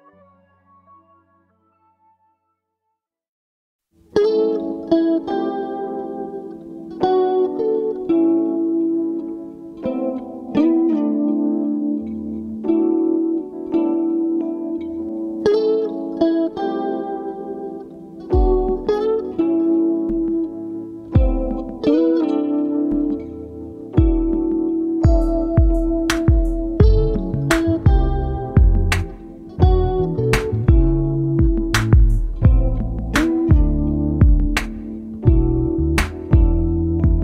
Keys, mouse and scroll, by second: 1.7 ctrl+g, 2.8 KP_5, 4.1 click, 5.0-5.3 ctrl+scroll up 3, 6.2 ctrl+click, 9.1 click, 9.7 click, 10.5-12.1 ctrl+drag, 12.3 ctrl+click, 13.1-13.7 ctrl+drag, 14.1 shift+Up, 17.2 click, 17.9 ctrl+scroll down 2, 19.5 click, 20.4 click, 21.5-22.9 shift+drag, 24.0 ctrl+g, 25.4-26.9 ctrl+shift+drag, 27.5-28.9 ctrl+drag, 29.2 space, 32.4 click, 33.4 click, 34.2 ctrl+click, 34.7-35.1 ctrl+scroll up 2, 35.6 ctrl+click.